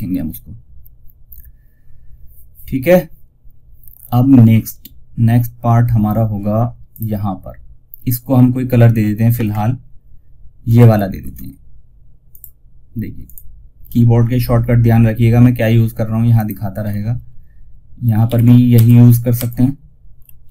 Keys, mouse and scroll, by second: 6.2 click, 10.4 ctrl+alt+shift+s, 11.6 click, 15.6 click, 18.0 ctrl+e, 19.8 ctrl+r.